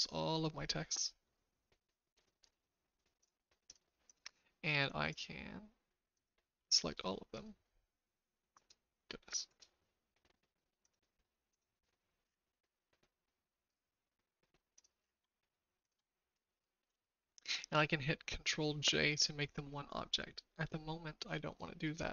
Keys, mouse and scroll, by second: 3.6 click, 4.0 click, 6.1 click, 8.5 click, 9.4 click, 17.0 shift+middle click.